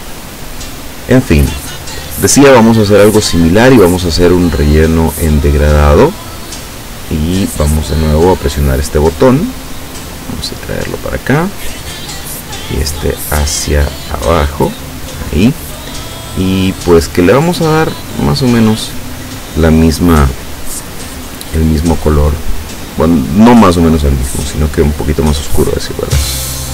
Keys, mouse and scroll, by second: 4.2 click, 8.5 click, 9.6-11.2 drag, 12.7-14.7 drag, 16.0 click, 19.5 click, 20.8-23.6 drag, 24.8 click, 26.6 click.